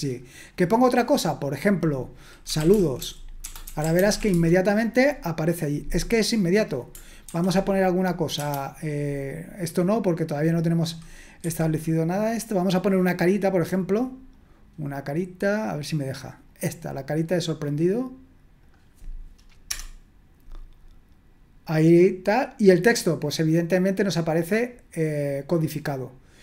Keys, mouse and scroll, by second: 0.2 click, 2.2-4.6 typing, 7.3 shift+/, 10.3 click, 11.4 Escape, 12.1 click, 13.9 click, 16.4 click, 18.6 click, 19.7 Return.